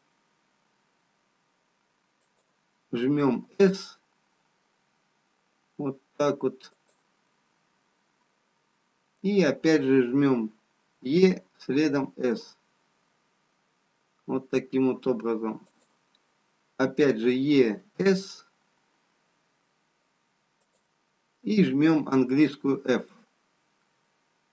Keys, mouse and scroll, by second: 3.6 s, 7.5 middle click.